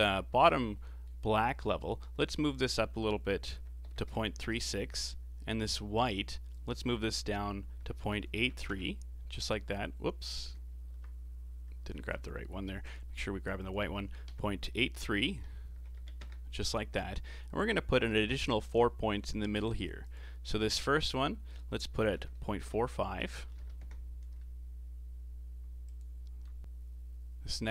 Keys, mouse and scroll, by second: 0.8 middle click, 1.8-5.5 drag, 5.9 click, 6.5-9.5 drag, 10.3 click, 10.8 ctrl+z, 11.9 ctrl+z, 12.8-16.6 drag, 20.0-26.7 drag.